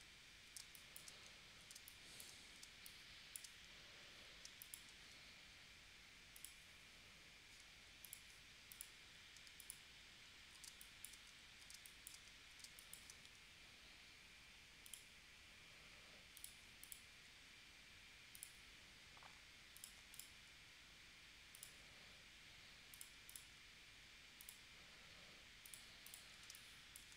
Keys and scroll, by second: 0.8 space, 1.7 space, 2.6 space, 4.5 space, 10.7 space, 11.7 space, 12.6 space, 26.5 space.